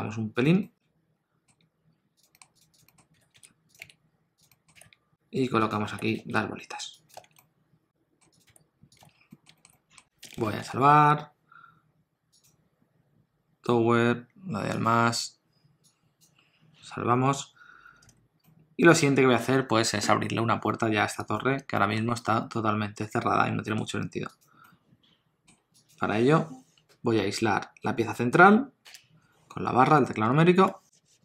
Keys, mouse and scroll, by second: 0.6 middle click, 1.5 s, 2.3 middle click, 2.6 click, 2.7 click, 2.9 middle click, 3.2 g, 3.8 shift+d, 4.5 middle click, 4.7 g, 5.9 g, 7.2 alt+a, 7.4 middle click, 8.4 click, 8.5 g, 9.0 alt+a, 9.1 scroll down 2, 9.3 middle click, 9.5 shift+middle click, 9.7 middle click, 16.2 click, 18.4 middle click, 21.3 click, 21.8 shift+middle click, 22.2 middle click, 24.3 click, 24.6 middle click, 25.7 click, 30.2 KP_1.